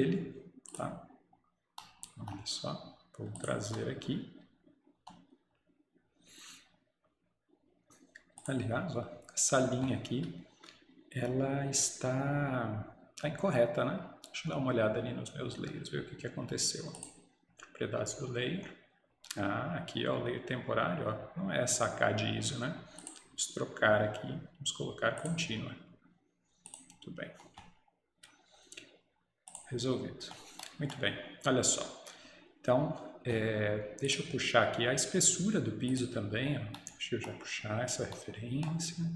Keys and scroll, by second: 3.8 Escape.